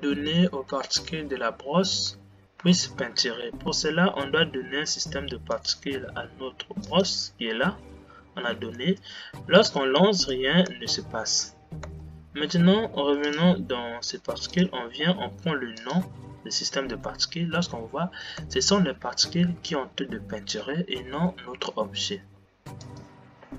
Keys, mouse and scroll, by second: 7.3-8.9 drag, 8.9 space, 10.6 space, 12.3 space, 16.2-17.2 drag, 17.2 space, 18.8 space, 19.6 g.